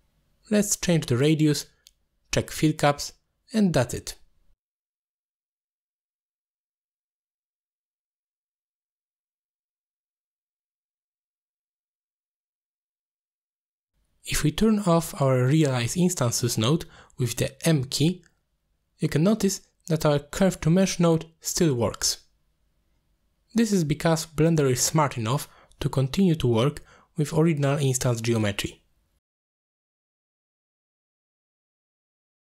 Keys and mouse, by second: 6.6 click, 8.0-9.2 drag, 9.0 m, 9.7-12.5 drag, 17.8 middle click, 18.6 click, 19.6 m, 20.4 m, 22.1 m, 22.5 m, 23.5 middle click, 24.3 click, 25.2 click, 25.7 ctrl+click, 26.0 click, 26.5 middle click, 26.8 click, 27.0-29.3 drag, 29.5 middle click, 30.1 shift+click, 31.0 middle click, 31.9 click, 32.0-32.4 drag.